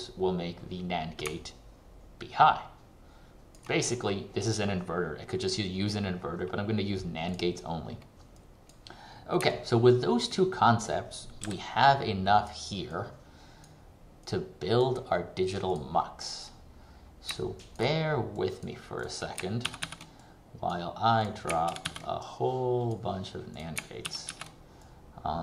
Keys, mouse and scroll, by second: 1.5 ctrl+click, 9.7 ctrl+click, 10.9 click, 16.9-17.5 scroll down 1, 17.5 ctrl+click, 18.5 click, 18.7 click, 19.7 ctrl+c, 19.9 ctrl+v, 20.3 click, 21.7 ctrl+c, 21.9 ctrl+v, 22.3 click, 24.1 ctrl+c, 24.5 ctrl+v, 24.9 click.